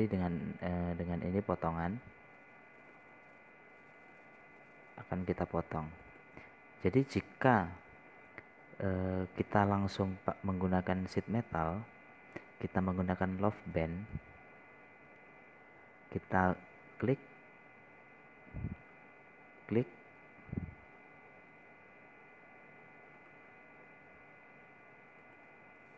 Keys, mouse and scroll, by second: 4.3 click.